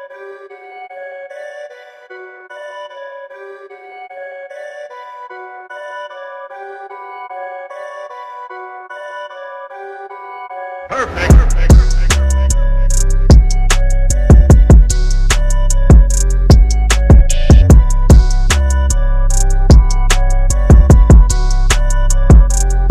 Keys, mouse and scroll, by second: 3.1 click, 12.3 click, 15.3 KP_9, 15.9 KP_5, 16.9 Tab, 18.8 KP_9, 19.0 KP_5, 20.5 click, 21.3-22.7 scroll up 1.